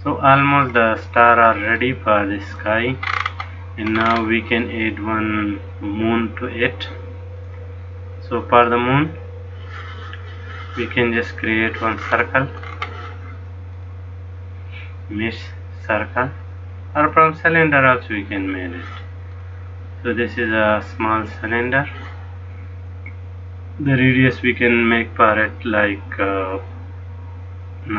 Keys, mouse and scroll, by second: 0.5-1.2 scroll down 6, 1.9 middle click, 3.2-4.0 scroll up 7, 4.1-4.6 scroll up 5, 4.8 middle click, 7.5 click, 8.6 click, 12.1-13.2 scroll down 13, 13.9 click, 19.5 middle click, 24.3 click.